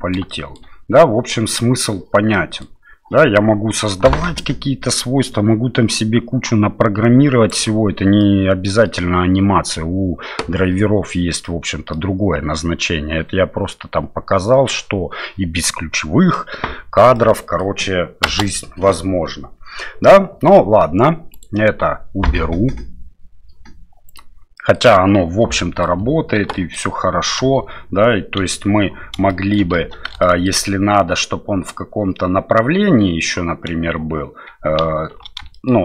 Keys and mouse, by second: 0.3 shift+middle click, 2.3 middle click, 4.4-7.5 drag, 8.2 middle click, 11.4 middle click, 17.1 middle click, 18.2 space, 21.4-23.6 right drag, 24.1 right click, 24.6 middle click, 25.5 middle click, 26.5 shift+middle click, 27.4 space, 28.4 KP_7, 29.3 shift+middle click, 29.7 space, 30.2 shift+middle click, 34.9 shift+c, 35.5 middle click.